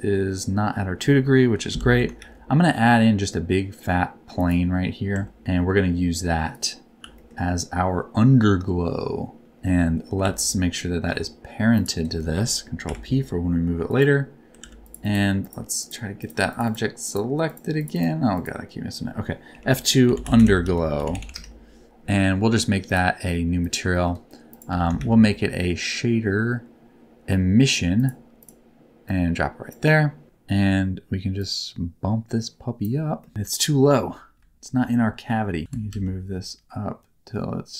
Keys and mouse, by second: 1.5 KP_7, 1.7 alt+z, 2.1 shift+a, 5.1 Tab, 5.4 s, 6.5 click, 7.1 s, 9.5 Tab, 9.6 middle click, 10.2 alt+z, 10.3 middle click, 12.8 ctrl+p, 14.5 alt+z, 14.8 click, 15.4 click, 15.8 click, 16.1 click, 16.5 click, 16.6 click, 17.8 click, 17.9 click, 19.4 F2, 22.9 click, 23.6 click, 24.0 middle click, 24.5 click, 24.6 x, 24.9 shift+a, 29.0 click, 29.2 click, 31.5-32.8 drag, 33.2 middle click, 33.3 KP_1, 34.3 KP_3, 35.6 g, 35.9 z.